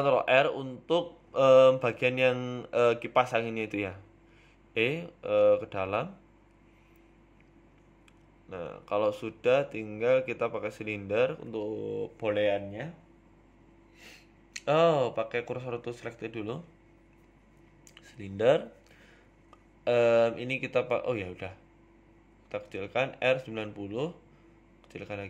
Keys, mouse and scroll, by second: 3.0 middle click, 3.5 Tab, 3.9 Tab, 4.4 click, 5.0 right click, 5.3 middle click, 5.7 e, 8.4 KP_1, 8.9 shift+middle click, 10.3 shift+a, 12.0 right click, 12.2 Tab, 12.8 shift+a, 15.3 ctrl+z, 15.8 shift+s, 16.9 shift+s, 17.8 shift+a, 21.4 click, 23.1 click, 23.5 s, 24.6 r.